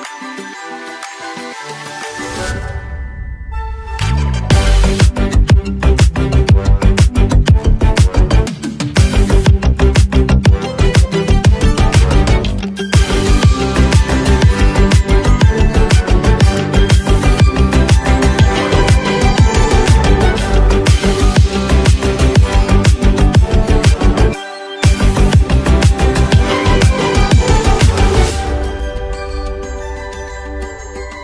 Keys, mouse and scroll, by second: 0.3-6.3 drag, 9.2 x, 9.8-11.8 drag, 11.8 ctrl+z, 14.3 click, 21.0-21.7 alt+scroll down 1, 25.8 click, 29.0 click.